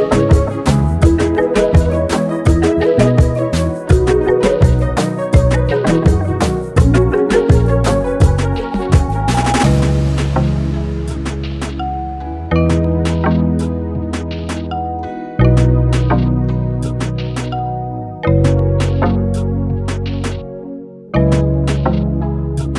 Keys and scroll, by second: 21.7 g.